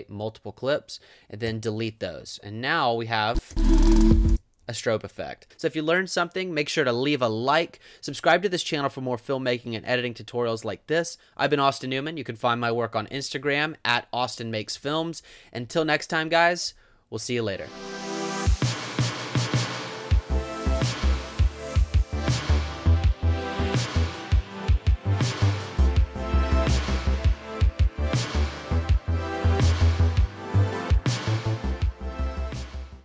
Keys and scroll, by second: 1.5 BackSpace, 3.5 space, 14.8 space.